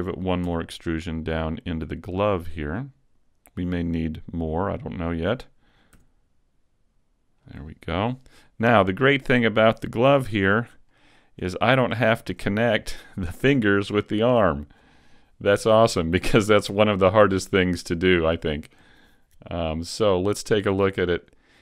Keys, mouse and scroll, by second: 0.5 e, 3.9 click, 6.0 s, 7.6 click, 8.4-8.9 scroll down 1, 8.9 shift+middle click, 9.5 scroll down 1, 10.1 a, 10.6-11.0 scroll down 3, 11.0 shift+middle click, 12.1 shift+middle click, 15.3 scroll down 2.